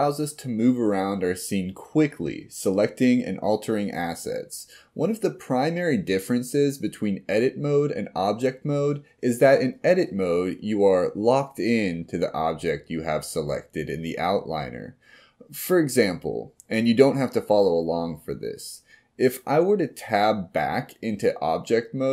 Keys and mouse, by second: 17.8 click, 19.3 Tab.